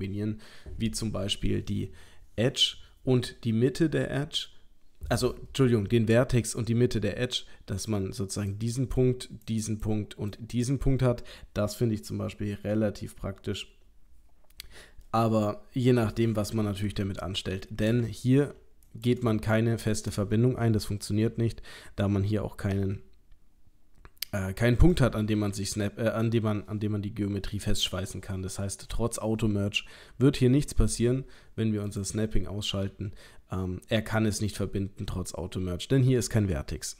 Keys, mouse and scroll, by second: 8.5 click, 9.3 click, 10.3 click, 15.1 middle click, 17.2 shift+middle click, 18.2 ctrl+middle click, 18.9 click, 19.3 shift+middle click, 21.3 g, 25.4 middle click, 31.9 click, 32.8 g.